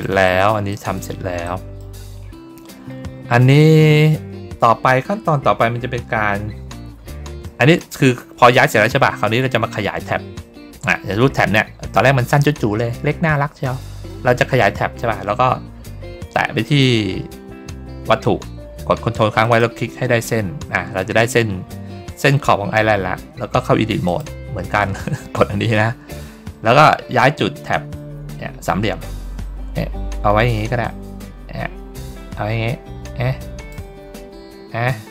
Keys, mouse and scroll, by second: 0.1 middle click, 0.6 middle click, 1.3 middle click, 7.3 middle click, 7.9 ctrl+middle click, 9.2 ctrl+middle click, 9.6 ctrl+middle click, 11.2 ctrl+middle click, 11.7 ctrl+middle click, 13.6 middle click, 16.6 click, 19.3 ctrl+click, 24.0 click, 28.2-33.6 drag.